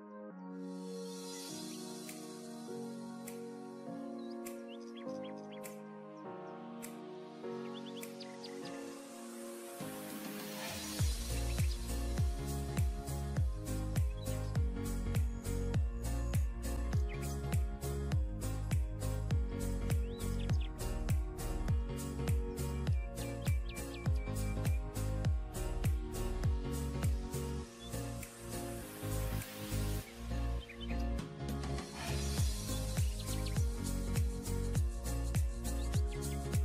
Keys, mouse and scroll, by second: 2.2 double click, 3.1-3.7 scroll down 1, 7.4 typing, 9.1 double click, 16.0 typing, 18.1 double click, 20.3 double click, 32.8 scroll down 1, 34.7 double click.